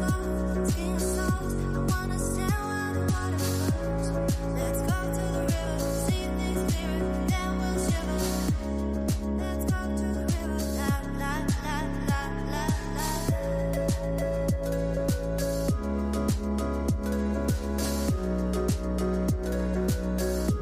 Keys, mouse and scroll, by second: 2.1-5.1 middle drag, 5.1-5.9 scroll up 17, 5.9 middle click, 6.3-7.5 scroll up 4, 7.5-12.2 drag, 12.2-14.9 right drag, 14.9-18.2 drag, 19.5-20.6 drag.